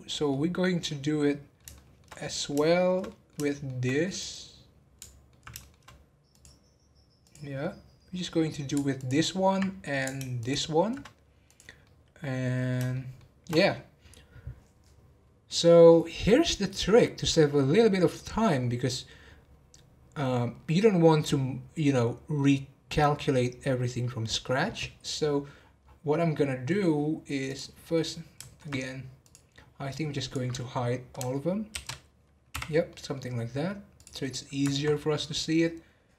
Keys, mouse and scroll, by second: 0.3-3.3 middle drag, 3.3 scroll down 1, 3.4-6.3 shift+middle drag, 6.3 click, 7.5 middle click, 8.3 scroll up 3, 8.9 alt+click, 10.3 alt+shift+click, 11.4 click, 11.8-16.1 middle drag, 25.5-26.3 scroll down 9, 26.3 scroll up 3, 26.7 middle click, 27.4 click, 27.8-29.2 middle drag, 29.2 click, 29.6 scroll down 3, 32.9-34.0 middle drag, 34.0 click, 34.3 middle click, 34.9-35.5 scroll up 2, 35.5-36.1 scroll up 1.